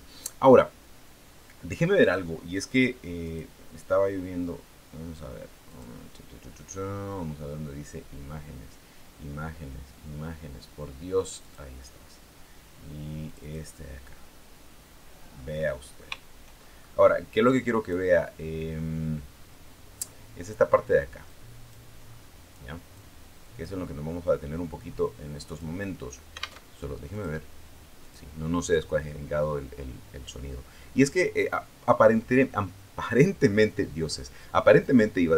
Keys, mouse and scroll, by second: 0.2 scroll down 2, 3.0 click, 5.5 click, 11.0 click, 13.0 click, 15.0-15.3 scroll up 2, 16.4 shift+middle click, 16.6 shift+scroll up 2, 16.8 shift+click, 18.1-18.6 scroll up 2, 19.4 scroll down 2, 20.2 scroll down 4, 21.0 click, 21.7 scroll down 2, 21.8-22.3 scroll up 2, 22.7 click, 25.3 click, 26.4 alt+Tab, 26.9 click, 27.8 click.